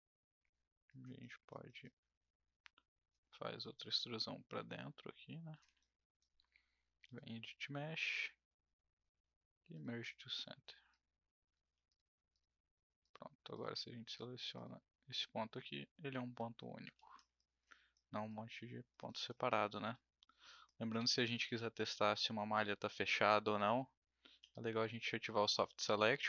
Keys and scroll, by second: 11.6 w, 16.9 ctrl+z, 24.4 b.